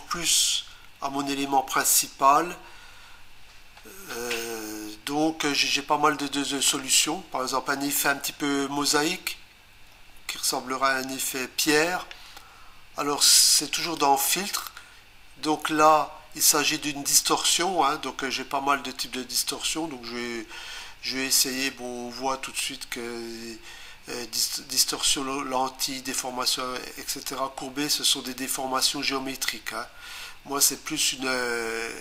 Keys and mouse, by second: 13.8 click.